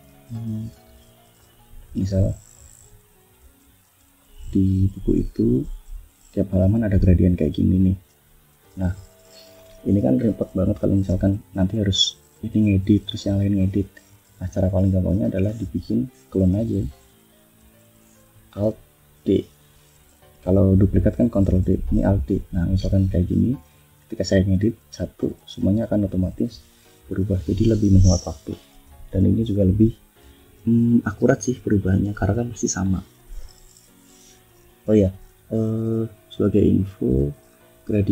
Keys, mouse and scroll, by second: 0.3 ctrl+shift+a, 1.3 click, 1.7 click, 2.0 click, 2.4-3.5 drag, 5.0-6.2 drag, 6.9 click, 8.4 click, 9.4 shift+scroll down 2, 10.6 shift+scroll down 2, 11.1 shift+click, 11.5 shift+click, 13.8 click, 14.5 click, 15.8 alt+d, 16.3-17.6 alt+drag, 19.0 alt+d, 19.6-21.1 alt+drag, 22.1 click, 22.7 click, 23.5 click, 25.1 click, 26.5-27.9 drag, 28.0 click, 29.4 click, 31.4-32.9 drag, 33.0 click, 37.2 click.